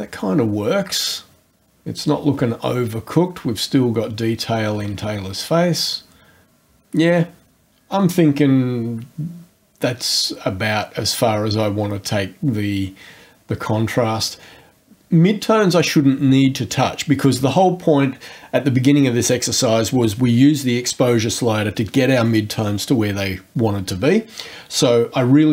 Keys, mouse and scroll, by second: 2.5 scroll down 1, 2.7-3.1 scroll up 1.